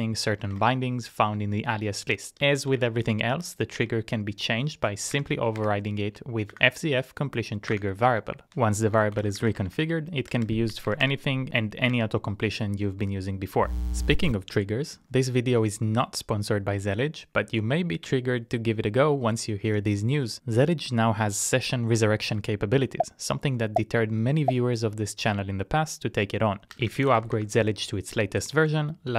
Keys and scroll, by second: 0.2 typing, 0.5 ctrl+e, 2.4-3.2 typing, 3.8 Tab, 4.8 BackSpace, 5.1 shift+`, 5.6 shift+`, 6.7 typing, 7.9 Return, 8.7-11.0 typing, 11.9 Tab.